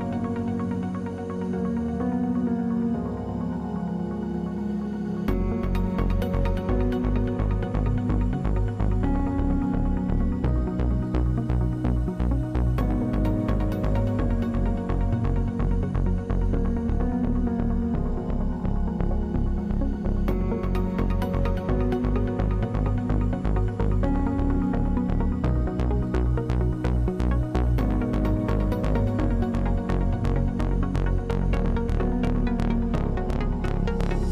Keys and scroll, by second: 9.7 1, 20.1 w, 22.9 space, 23.7 space.